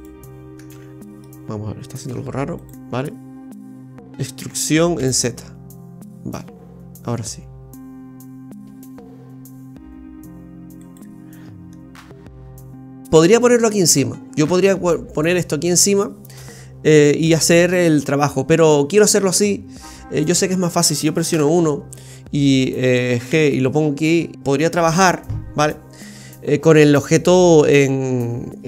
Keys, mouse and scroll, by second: 0.7 ctrl+z, 0.9 middle click, 2.0 ctrl+z, 2.6 click, 3.1 middle click, 4.4 e, 11.4-11.7 scroll down 1, 11.7 middle click, 12.2 scroll up 1, 12.4-13.2 scroll down 2, 19.9-20.4 scroll down 2, 20.2 middle click, 21.2 KP_1, 23.3 g.